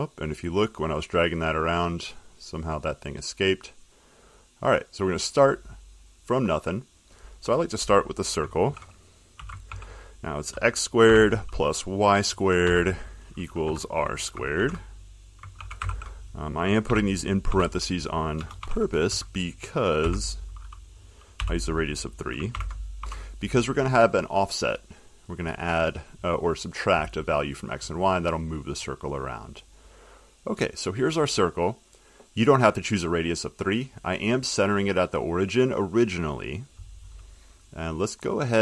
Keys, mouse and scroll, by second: 0.4 click, 3.7 click, 4.5 click, 7.1 click, 8.8-11.2 typing, 12.8-13.8 typing, 15.5-18.2 typing, 21.6 3, 22.7-23.2 typing, 25.2 click, 33.6 middle click, 33.7 middle click, 38.2 click.